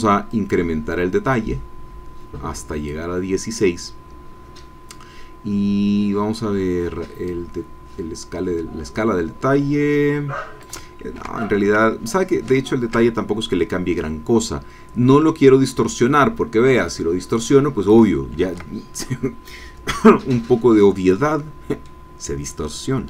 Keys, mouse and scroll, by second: 0.3-3.1 drag, 7.3-10.8 drag, 11.1 ctrl+z, 12.4 ctrl+z, 14.4-18.1 drag, 18.4 ctrl+z, 21.1 click.